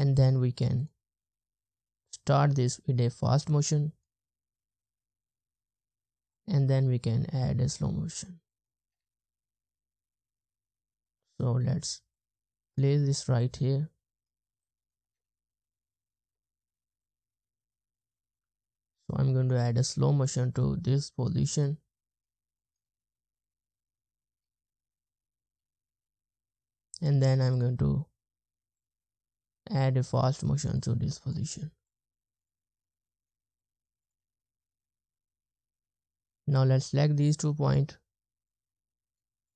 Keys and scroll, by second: 4.5 space, 5.1 space, 8.8 space, 9.6 space, 15.0 space, 16.3 space, 22.9 space, 23.5-25.6 scroll up 1, 26.4 space, 34.2 space, 35.8 space.